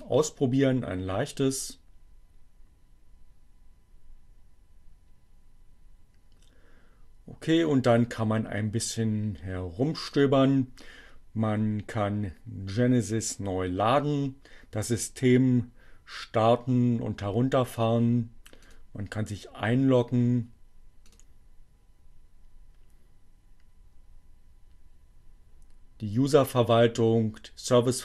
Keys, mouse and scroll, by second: 0.0 click, 10.1 click, 17.3 click, 18.6 click, 21.1 click.